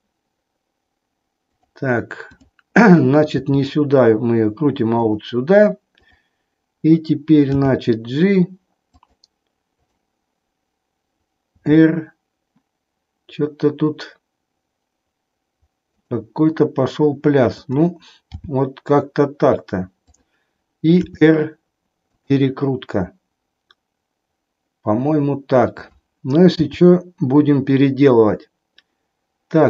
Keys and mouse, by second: 2.4-3.4 drag, 3.5 r, 5.0 click, 7.7 g, 9.8-10.8 drag, 11.7 r, 17.5-18.5 drag, 18.7 g, 21.0 r, 26.8 g.